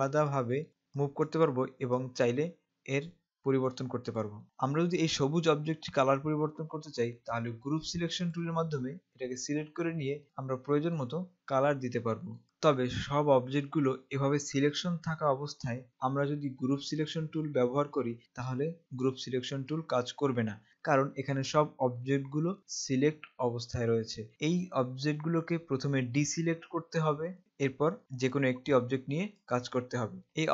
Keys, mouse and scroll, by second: 1.0 click, 8.4 click, 12.4 click, 17.2 click, 20.3 click, 27.4 click.